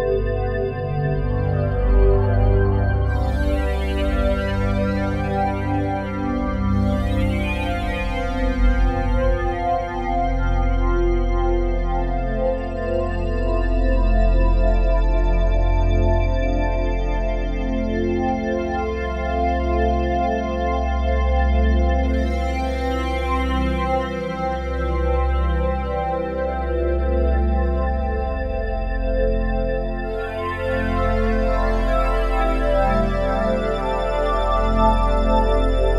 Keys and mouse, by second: 1.3 space, 1.7 click, 5.3 ctrl+s, 7.2 click, 8.6-16.0 drag, 15.9-16.4 typing, 16.6 Return, 17.9-18.6 typing, 20.8-21.8 drag, 23.3-27.4 drag, 29.7-32.3 drag, 33.5 click.